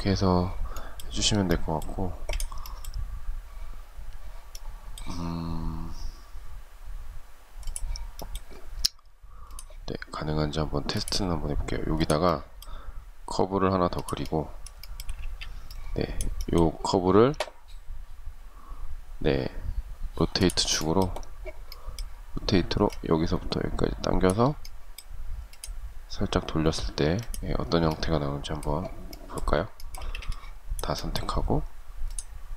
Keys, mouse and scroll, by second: 1.3 space, 14.0 shift+middle click, 14.4 space, 29.2 space.